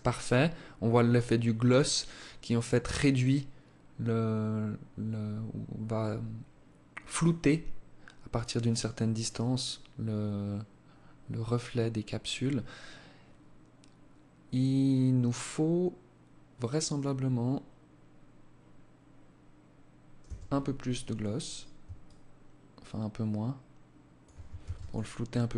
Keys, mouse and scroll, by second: 19.1 Escape, 21.0 shift+click, 23.5 ctrl+s.